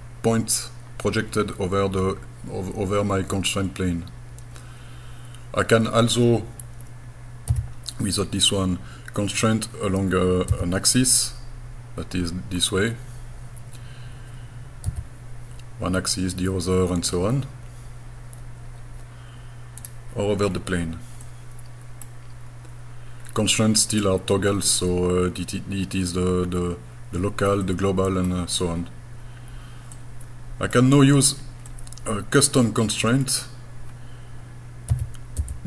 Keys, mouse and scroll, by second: 7.5 g, 10.5 x, 14.9 y, 19.8 right click, 20.4 scroll down 2, 21.3 middle click, 21.3 scroll down 2, 22.4-22.8 scroll up 3, 23.2 scroll down 2, 23.9 middle click, 25.2 scroll up 2, 25.9-26.3 scroll down 1, 27.6 middle click, 28.5 scroll down 2, 29.2 scroll up 2, 30.0 middle click, 31.0 scroll down 2, 31.7-32.9 middle drag, 33.3 scroll up 2, 34.9 g.